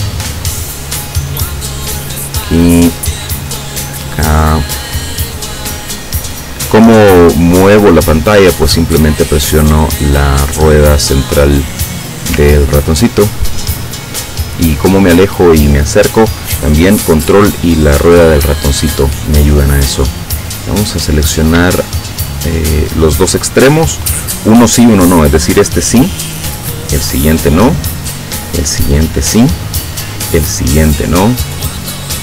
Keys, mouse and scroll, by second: 1.0 click, 1.9 click, 3.2 click, 4.0 click, 4.8 middle click, 5.8 click, 7.3 click, 8.8 click, 10.5 click, 11.7 click, 12.7-13.4 ctrl+scroll down 3, 13.9 ctrl+middle click, 20.6 click, 21.9 shift+click, 27.8 shift+click, 29.4 shift+click, 30.7 shift+click.